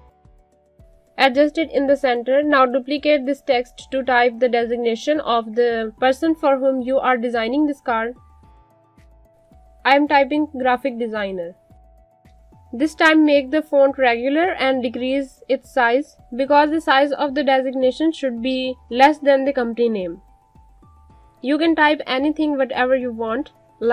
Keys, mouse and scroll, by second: 2.2 shift+click, 3.0 click, 9.0 click, 11.9-14.7 typing, 14.5 click, 18.9 click, 22.6 alt+shift+click.